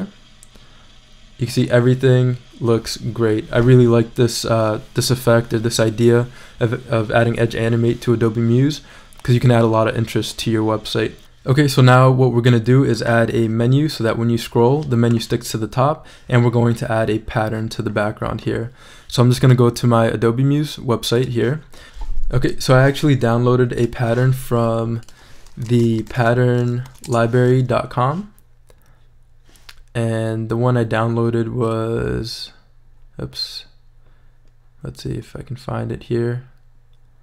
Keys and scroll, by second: 25.4-26.7 typing, 27.1 Return.